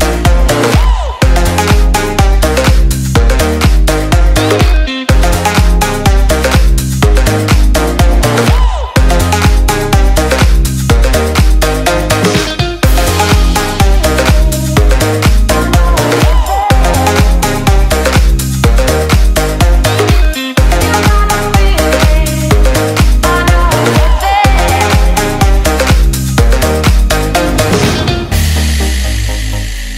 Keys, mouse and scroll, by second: 2.8 click, 14.0 click, 19.4-20.4 scroll up 1, 21.1-22.2 click, 27.6 alt+scroll up 1, 27.8 scroll down 1, 28.3 click, 29.1 alt+Tab.